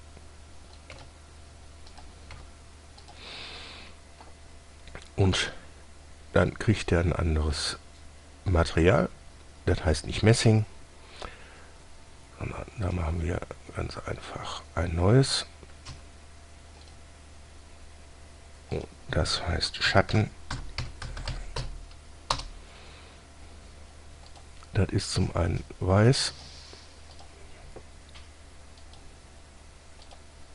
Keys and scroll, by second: 0.1 s, 1.2 typing, 2.6 typing, 16.2 Escape, 20.2-22.6 typing.